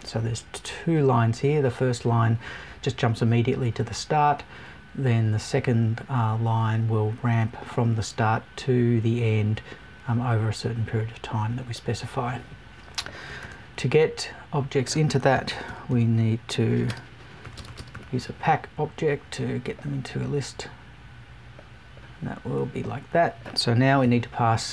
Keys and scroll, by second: 24.0 Left.